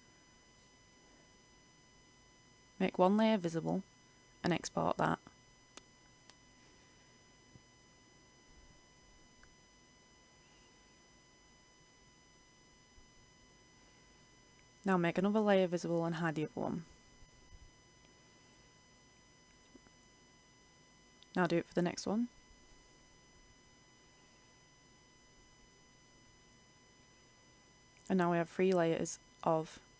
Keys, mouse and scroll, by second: 0.0 ctrl+f, 3.0 click, 6.4 ctrl+shift+e, 7.4 ctrl+shift+r, 13.8 Return, 15.4 click, 16.9 ctrl+shift+e, 17.4 ctrl+shift+r, 20.8 click, 21.7 ctrl+shift+s, 23.8 click, 24.3 ctrl+shift+e, 24.9 ctrl+shift+r, 28.2-29.9 drag.